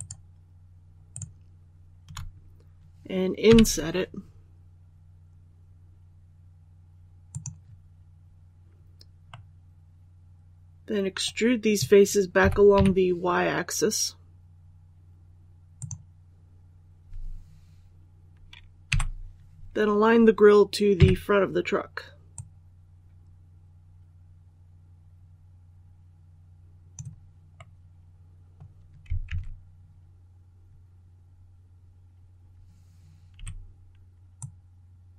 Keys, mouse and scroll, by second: 1.0 shift+right click, 3.3 i, 7.2 click, 9.2-11.3 middle drag, 12.3-12.6 typing, 15.7 click, 18.8 l, 20.9 KP_3, 22.2-27.3 drag, 27.5 middle click, 29.1 alt+a, 33.2 i, 34.3-35.1 drag.